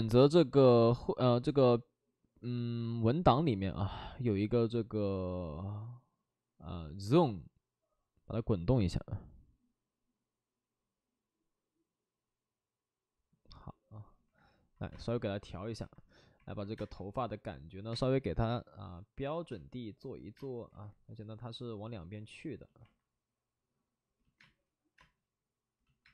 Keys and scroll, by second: 14.9 space, 16.7 space, 16.9 3, 17.9 space, 19.4 space, 20.6 ctrl+z, 24.3 space, 24.9 space, 26.0 space.